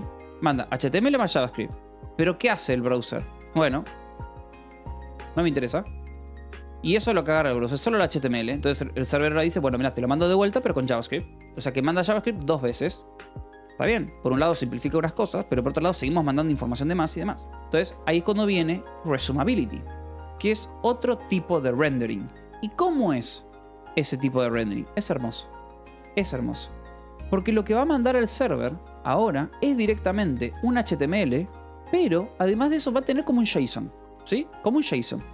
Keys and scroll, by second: 1.1 Escape, 2.1 l, 3.6 v, 3.8 e, 4.6 h, 5.0 c, 5.2 Escape, 6.2 l, 6.9 v, 7.5 e, 7.5 Escape, 8.6 l, 10.5 v, 11.2 e, 11.3 Escape, 13.8-14.7 typing, 17.2-19.5 typing, 17.6 Escape, 19.8 Escape, 24.9 a, 25.4 BackSpace, 27.5-32.4 typing, 32.9 Escape.